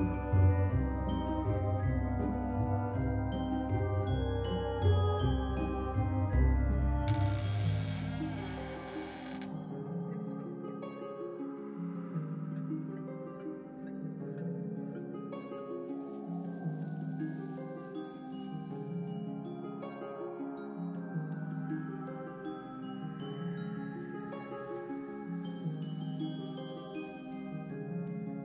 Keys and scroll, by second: 3.4 shift+s, 9.0 alt+x, 15.3 alt+x, 21.0 alt+x, 23.3 alt+x, 25.3 alt+z.